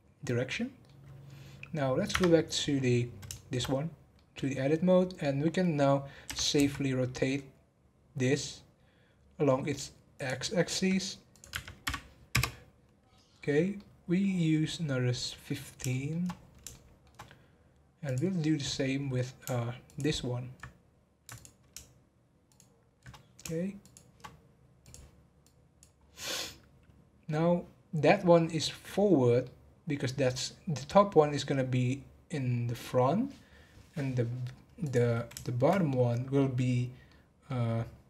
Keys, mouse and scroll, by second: 2.1 Tab, 3.3 shift+middle click, 3.7-4.1 scroll up 3, 4.1-6.2 middle drag, 6.2 r, 11.3-13.8 drag, 13.8-16.3 middle drag, 16.3-16.7 scroll down 1, 16.7-18.0 shift+middle drag, 18.0 click, 19.0 scroll up 2, 19.8 alt+click, 21.3 alt+click, 22.4 alt+shift+click, 23.8 shift+click, 24.8-26.0 drag, 26.0 scroll down 2, 26.2-29.3 middle drag, 29.4-32.5 middle drag, 33.7 scroll up 2, 34.7 scroll up 1, 34.8 click, 35.4-38.0 shift+middle drag.